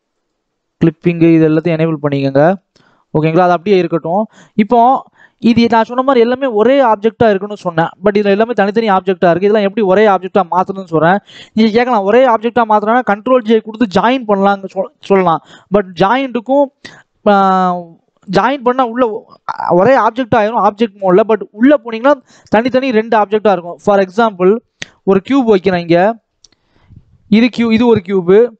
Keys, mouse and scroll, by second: 0.0 click, 1.1 click, 2.0-2.6 scroll up 1, 3.1 Tab, 3.9 click, 4.2 scroll down 1, 4.4 middle click, 4.9-6.9 scroll up 1, 6.9 click, 7.7 click, 8.4 click, 9.5-10.0 scroll down 4, 10.0 middle click, 10.4-10.9 scroll up 2, 10.9 ctrl+s, 19.2 KP_1, 19.6-22.4 scroll up 2, 22.4 click, 22.8-23.6 scroll down 2, 23.6 shift+a, 25.2 g, 26.5 shift+middle click, 27.0-27.6 scroll up 1, 27.6 g.